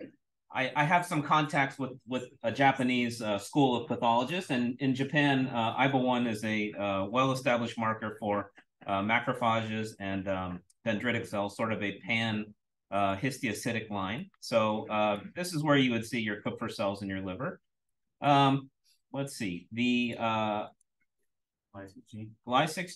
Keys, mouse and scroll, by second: 12.5-13.0 scroll up 1, 13.0-13.5 scroll up 1, 13.5-14.1 scroll down 1, 14.1 scroll down 1, 14.2-14.6 drag, 15.1-15.5 drag, 16.0-16.4 drag, 16.8-17.2 scroll up 1, 17.2-18.1 scroll down 1, 17.8-18.1 drag, 20.0 click, 20.6 click, 22.0-22.9 scroll up 1.